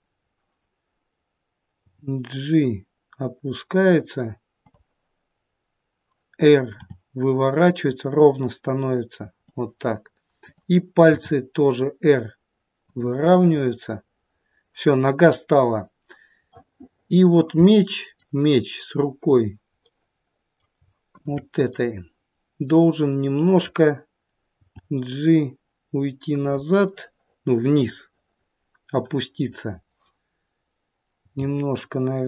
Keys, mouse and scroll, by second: 1.8 g, 6.7 r, 10.3 click, 11.0 r, 13.2 middle click, 15.2-16.2 scroll up 1, 16.2 scroll up 1, 16.5 middle click, 17.5 middle click, 19.2 click, 19.8 middle click, 21.0 shift+click, 21.6 middle click, 24.5 g, 26.7 middle click, 31.2 g.